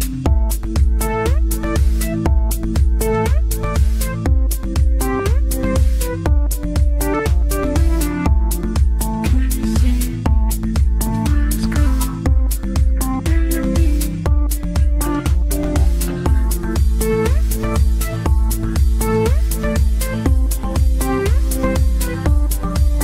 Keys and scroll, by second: 14.3 g.